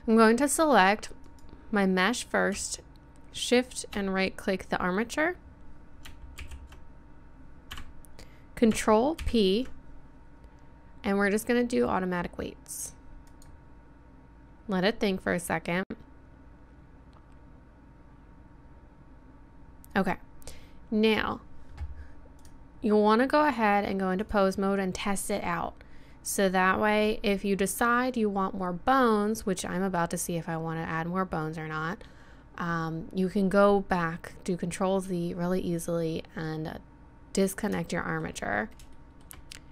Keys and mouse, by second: 1.1 a, 1.3 click, 3.2 middle click, 5.5 middle click, 6.4 alt+p, 9.2 ctrl+p, 22.3-24.2 drag, 36.5-38.3 drag.